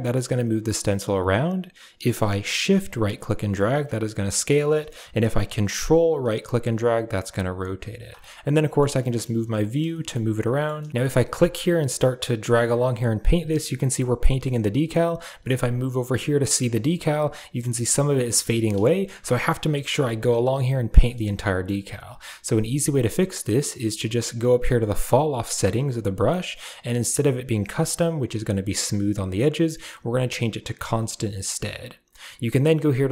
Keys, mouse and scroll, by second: 2.9-4.7 shift+right drag, 6.1-7.8 ctrl+right drag, 8.1 middle click, 8.9 middle click, 9.4 middle click, 9.8 shift+middle click, 10.4 shift+middle click, 10.6 middle click, 11.0-13.5 drag, 13.8 shift+middle click, 14.7 shift+middle click, 16.7 shift+middle click, 18.1 shift+middle click, 18.7 shift+middle click, 19.2-21.3 drag, 21.3 shift+middle click, 22.5 shift+middle click, 24.9-31.0 drag.